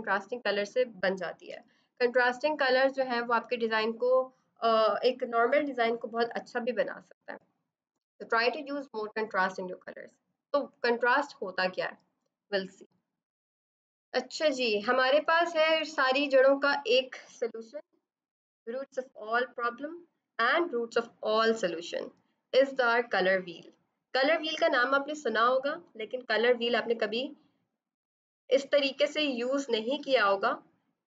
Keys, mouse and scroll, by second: 13.3 F8, 13.5 click, 15.1 ctrl+0.